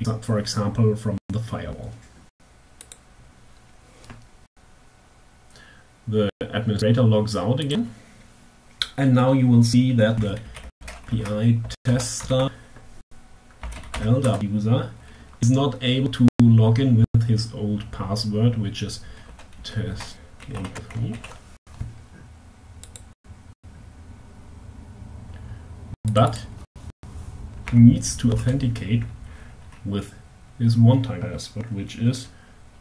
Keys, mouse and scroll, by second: 2.2 click, 6.0 click, 6.9 click, 9.7-11.3 typing, 11.7 alt+q, 13.1 l, 13.2 d, 13.3 a, 13.3 p, 13.7 Tab, 18.6-20.9 typing, 22.5 click, 25.4 click, 26.9 h, 27.7 BackSpace, 32.4 h.